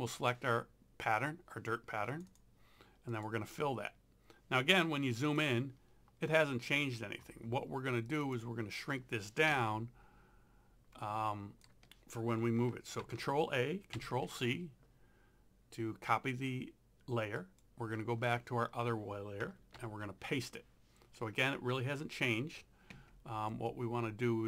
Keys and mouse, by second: 1.2 click, 5.3 click, 8.1 click, 9.6 ctrl+0, 10.9 z, 11.0 click, 13.0 ctrl+a, 14.0 ctrl+c, 17.4 click, 19.8 ctrl+v, 22.9 ctrl+0, 23.5 z, 23.7 click.